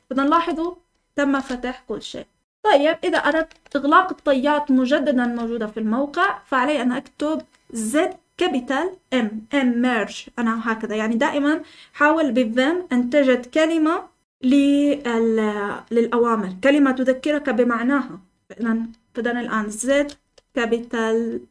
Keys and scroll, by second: 0.3 Escape, 1.3-6.0 typing, 19.8 typing.